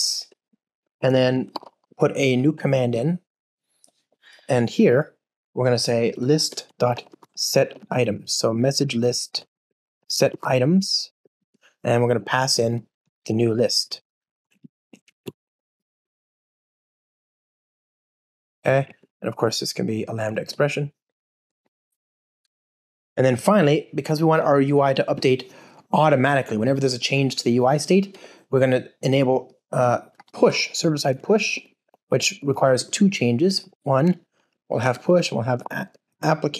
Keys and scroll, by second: 0.2 Return, 15.2 alt+Return, 33.5 Return.